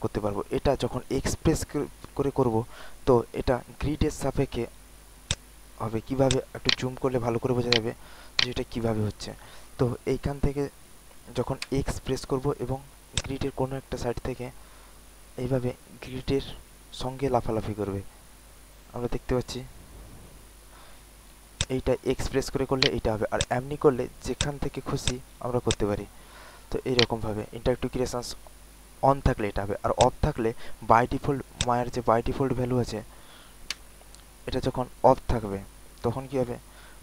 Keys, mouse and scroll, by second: 0.3 middle click, 0.6 alt+right click, 1.9 alt+x, 2.4 click, 2.8 click, 3.0 click, 3.2 click, 4.2 click, 5.2 click, 5.9 alt+middle click, 6.2 alt+click, 6.6 alt+right click, 7.7 alt+right click, 8.3 alt+right click, 8.8 alt+middle click, 11.7-13.6 typing, 13.1 click, 14.0 click, 14.3 click, 15.2 click, 15.3 click, 16.4 click, 17.6 click, 17.8 click, 20.2 click, 21.4 click, 21.5 click, 22.4 alt+middle click, 22.7 alt+right click, 23.3-25.0 drag, 26.5 alt+middle click, 26.9 alt+right click, 27.3 alt+middle click, 29.9 click, 32.0 scroll down 1, 33.6 scroll down 1, 33.7 w.